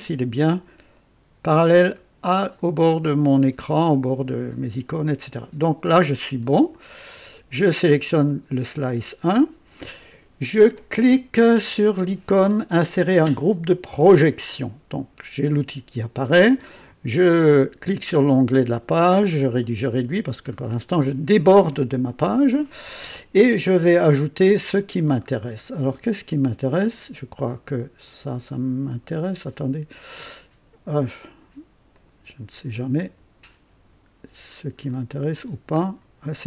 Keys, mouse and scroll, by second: 0.9-2.2 right drag, 2.6-5.9 right drag, 6.1 scroll up 2, 6.7 right click, 8.6 click, 14.0 click, 18.0 click, 18.8-20.7 scroll down 6, 25.0-25.3 scroll down 1, 25.5 right click, 26.8 click, 28.0 click, 28.9 click, 29.5-30.2 right drag, 30.3 right click, 30.3 click, 31.9 click, 32.7 click, 34.2-34.7 scroll down 2, 34.9-35.6 right drag, 35.8 scroll down 2.